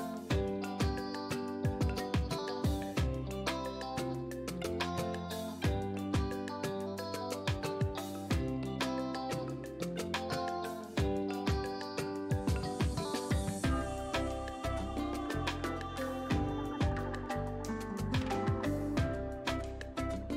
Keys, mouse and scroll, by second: 2.9-11.2 drag, 11.2 ctrl+a, 11.9-12.3 typing, 12.8 Return, 14.7 click, 15.7 ctrl+a, 16.7 click, 17.7 ctrl+d, 18.9 Down.